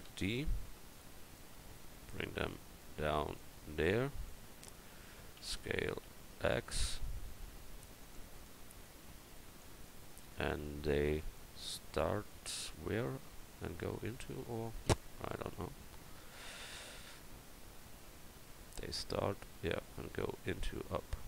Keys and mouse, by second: 0.1 shift+d, 0.9-7.1 drag, 5.4 s, 10.0 middle click, 11.3-12.7 middle drag.